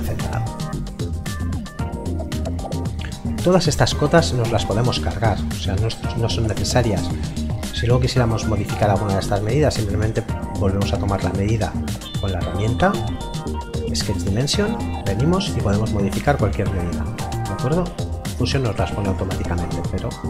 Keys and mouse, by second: 6.3 Escape, 12.1 click, 19.1 click, 19.6 d.